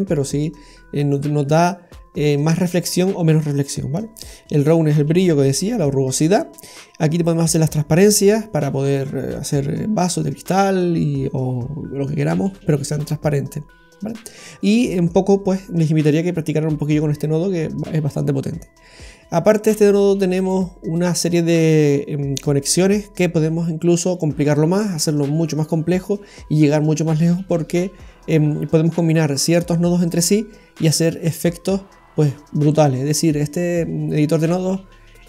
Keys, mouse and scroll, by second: 0.4 click, 5.5 scroll down 1, 6.2-6.7 scroll up 2, 13.2-14.1 scroll down 7, 14.7 middle click, 33.5-35.2 scroll down 5.